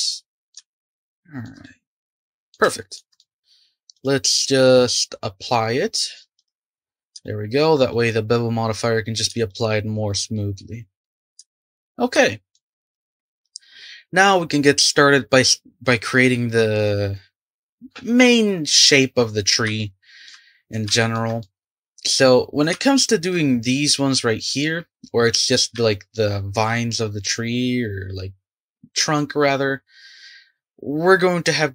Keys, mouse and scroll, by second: 3.9-6.6 drag, 6.8-7.2 scroll up 5, 7.2-11.3 shift+middle drag, 11.2 scroll down 4, 11.4-12.8 shift+middle drag, 19.4-19.8 scroll down 2, 19.8-22.4 shift+middle drag, 22.4-22.8 scroll up 1, 22.8-23.5 shift+middle drag, 23.5-25.5 scroll up 2, 25.5-25.8 scroll down 2, 25.8-28.8 shift+middle drag.